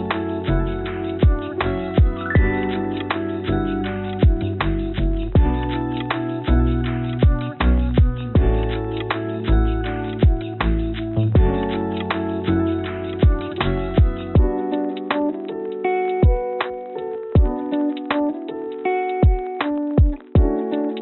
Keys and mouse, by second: 0.4 Tab, 5.5 ctrl+r, 14.0 click, 17.1 Tab, 19.3 click.